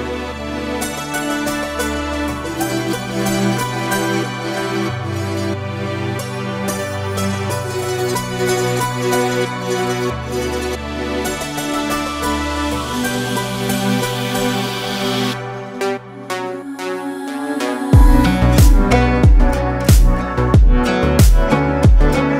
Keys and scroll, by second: 6.5 ctrl+space, 8.8 ctrl+space.